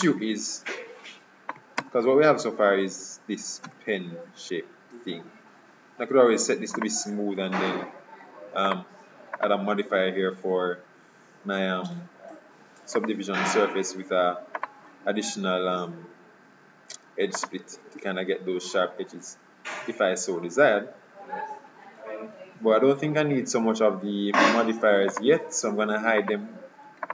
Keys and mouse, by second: 1.9 Tab, 3.7 z, 6.9-8.6 drag, 8.8-11.2 drag, 14.7-16.4 drag, 19.2-20.6 middle drag, 25.2-27.1 drag.